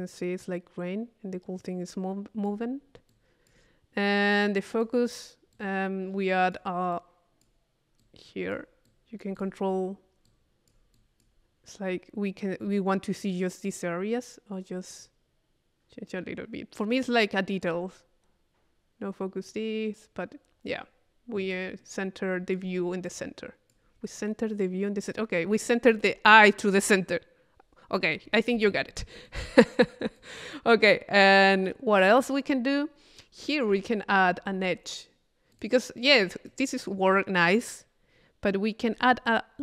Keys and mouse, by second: 4.1-5.2 drag, 5.5-6.6 drag, 6.9 click, 8.0-9.8 drag, 10.3-11.5 drag, 15.0-18.0 drag, 21.5-23.0 drag, 23.1 click, 28.7-30.0 drag, 29.3 right click, 30.2 click, 31.2 click, 33.2 click, 33.7 Tab, 35.5-37.1 drag.